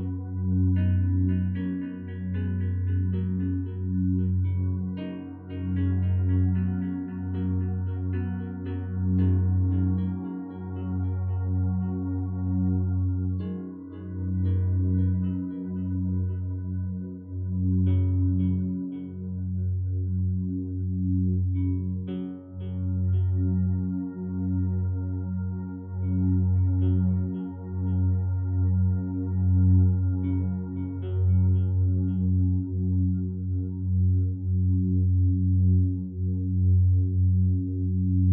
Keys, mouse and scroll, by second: 9.1 ctrl+7, 17.0 5, 17.2 Return, 30.9 right click.